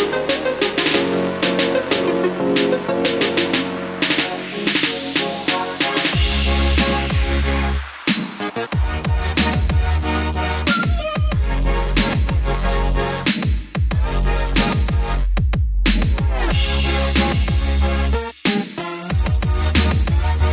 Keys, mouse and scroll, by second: 12.1-13.6 scroll up 1, 13.6-14.8 scroll down 1, 14.9-16.0 scroll up 1, 16.0-18.9 drag.